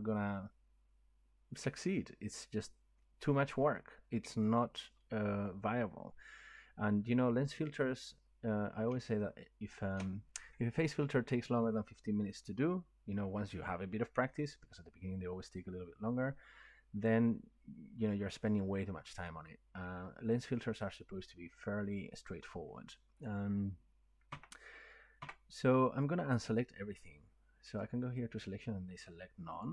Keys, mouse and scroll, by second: 2.2 scroll down 2, 3.0 middle click, 4.3 middle click, 5.5 scroll up 1, 6.8 scroll up 1, 8.3 scroll up 2, 9.9 shift+middle click, 24.3 Tab, 25.2 Tab, 27.8 click.